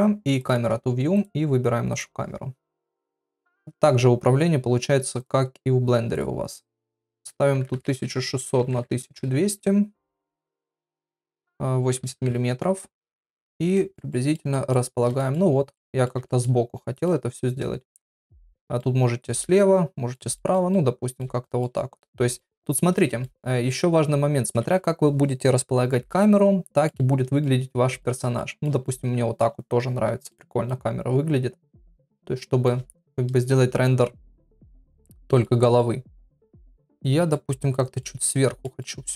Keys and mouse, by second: 0.4 click, 1.1 click, 6.1 click, 6.7-9.8 drag, 7.9 KP_0, 8.9 KP_0, 10.4 click, 11.3-12.8 drag, 13.7 shift+middle click, 14.1 middle click, 14.5 shift+middle click, 15.2 shift+middle click, 15.7 middle click, 16.2 shift+middle click, 17.0-18.6 shift+middle drag, 18.8-20.2 middle drag, 20.3 shift+middle click, 20.7 middle click, 21.4 shift+middle click, 22.3 shift+middle click, 22.7 middle click, 23.2 shift+middle click, 26.2 middle click, 27.4 shift+middle click, 28.3 middle click, 28.8 shift+middle click, 30.3 shift+middle click, 31.7 shift+middle click, 35.2 shift+middle click, 35.7-36.8 middle drag, 37.0 middle click, 37.5 shift+middle click, 38.2 middle click.